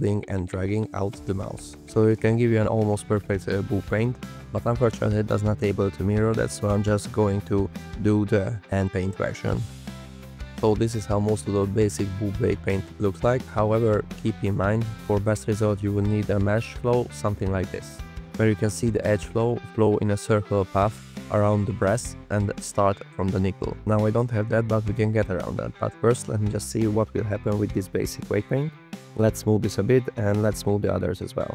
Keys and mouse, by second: 1.5 ctrl+alt+z, 1.5 alt+click, 5.7 f, 6.2 click, 6.9 click, 9.1 alt+click, 11.2 alt+click, 12.3 alt+click, 16.3 click, 17.9 click, 20.0 click, 24.7 click, 29.0 click, 29.6 click, 30.4 click, 31.1 alt+click.